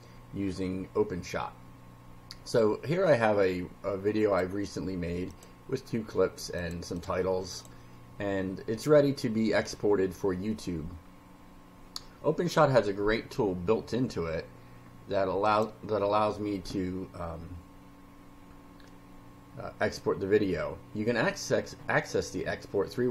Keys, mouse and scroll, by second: 4.2 click, 5.2 click, 6.6 click, 7.0 click, 7.5 click, 15.4 click.